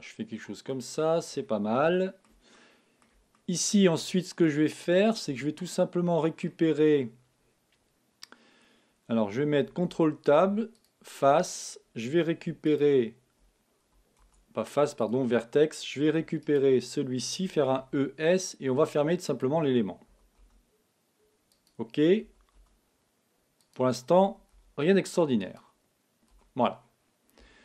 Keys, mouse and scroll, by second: 0.6 scroll down 1, 0.7-7.5 middle drag, 12.6-14.5 right drag, 16.4-18.0 right drag, 17.4 e, 19.4-21.2 drag, 20.0 e, 22.2-23.5 drag, 22.2 e, 23.7-25.5 drag, 24.2 e, 26.3 f.